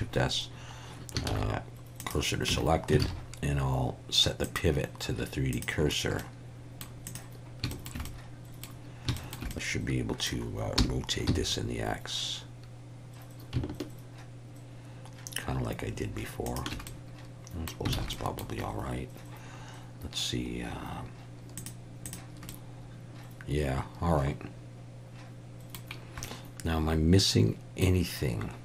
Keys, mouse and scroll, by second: 1.3 shift+s, 2.5 Tab, 3.0 alt+a, 4.5-5.6 drag, 6.2 middle click, 7.7 shift+middle click, 8.1 middle click, 9.2 shift+middle click, 9.5 middle click, 10.8 r, 11.3 x, 16.5 shift+click, 17.0 middle click, 18.0 alt+a, 18.1 middle click, 21.6 click, 22.1 click, 22.5-25.8 middle drag, 26.2-27.8 middle drag.